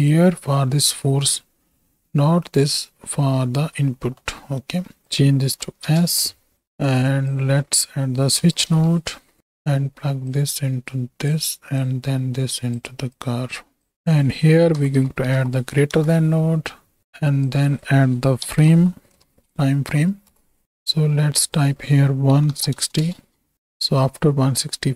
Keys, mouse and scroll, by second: 3.5 middle click, 4.1 middle click, 5.0 shift+click, 7.0-9.4 drag, 10.2-11.2 drag, 11.7-12.7 drag, 13.2 click, 13.9-15.9 drag, 17.5-20.3 drag, 20.6 click, 21.5-23.0 drag, 23.5 shift+Right, 23.5 shift+Right, 23.5 shift+Left, 24.2-24.9 drag.